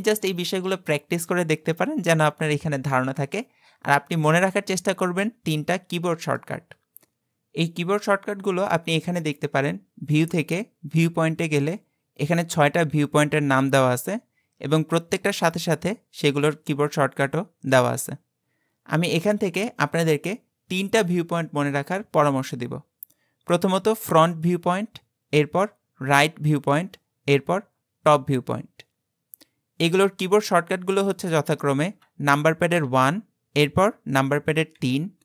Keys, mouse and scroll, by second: 9.2-12.4 drag, 32.9 KP_1, 34.8 KP_3.